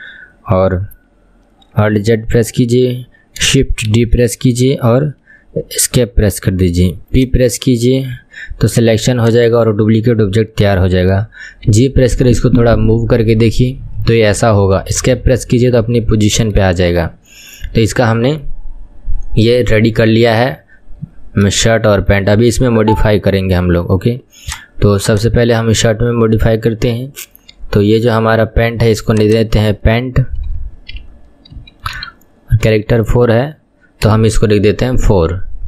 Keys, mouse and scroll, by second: 2.0 alt+z, 4.0 shift+d, 6.5 p, 8.3 Tab, 8.7 click, 9.2 click, 11.7 g, 16.9-19.9 shift+middle drag, 21.8-24.5 shift+middle drag, 24.5 click, 25.2 click, 29.1 click, 29.3-32.4 drag.